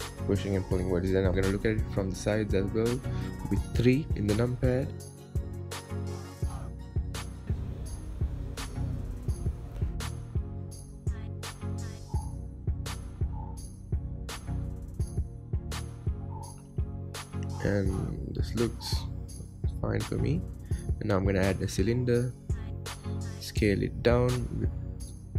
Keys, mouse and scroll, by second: 0.6 Tab, 1.7 KP_1, 1.9 KP_3, 2.6 Tab, 3.4 click, 4.2 g, 5.6 click, 6.0 g, 6.8 click, 8.1 click, 8.5 g, 9.1 click, 9.5 g, 11.1 click, 11.5 g, 12.6 click, 12.9 g, 14.3 click, 14.6 g, 15.3 click, 15.5 g, 17.1 click, 17.4 g, 18.5 Tab, 19.0-20.0 middle drag, 20.0 KP_1, 20.6-21.4 scroll down 5, 21.4 shift+a, 24.0 s.